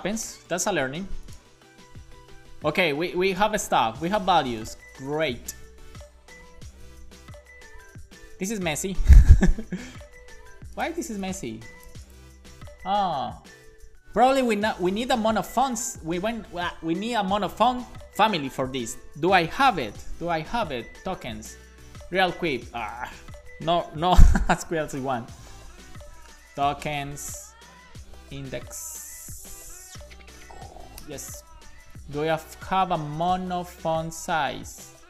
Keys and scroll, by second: 0.3 alt+shift+f, 0.6 super+s, 19.7 super+p, 21.6 Return, 24.2 shift+super+p, 24.5-27.7 typing, 25.5 Escape, 25.9 super+p, 28.9-29.9 typing, 31.2 Return.